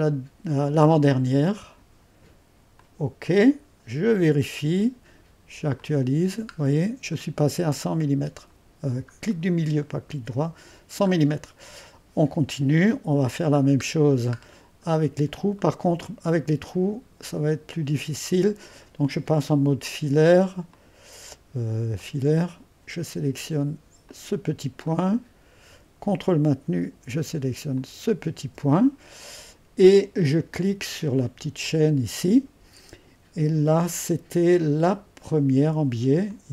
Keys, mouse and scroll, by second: 0.0-1.2 drag, 1.6-6.6 drag, 6.6 middle click, 7.5-9.9 drag, 9.9 middle click, 12.9 click, 13.6-14.1 scroll up 2, 14.1-14.9 scroll down 2, 14.9 middle click, 15.4-15.8 scroll up 2, 15.6-17.0 drag, 18.0-19.0 drag, 20.7-23.1 drag, 24.1-26.7 drag, 26.8 click, 27.8-29.2 drag, 31.7-34.8 drag, 34.9-36.5 drag.